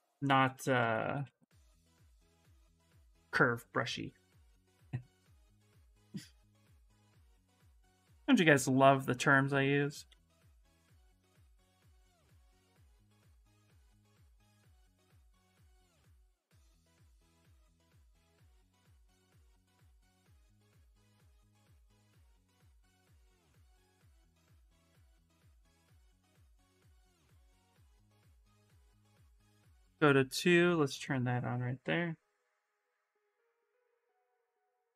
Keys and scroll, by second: 0.0 ctrl+z, 0.2 ctrl+z, 0.5 ctrl+z, 0.7 ctrl+z, 0.9 ctrl+z, 9.8 ctrl+z, 10.0 ctrl+z, 10.2 ctrl+z, 10.7 ctrl+z, 11.8-12.9 typing, 24.6 shift+f, 24.9 shift+f, 26.0-27.8 typing.